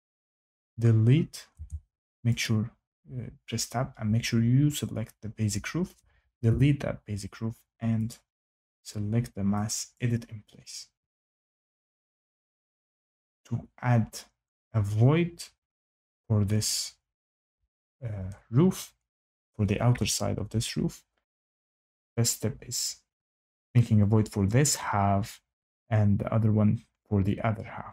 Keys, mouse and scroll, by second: 0.1 click, 1.5 Tab, 2.4 click, 6.4 Delete, 8.0 click, 9.9 click.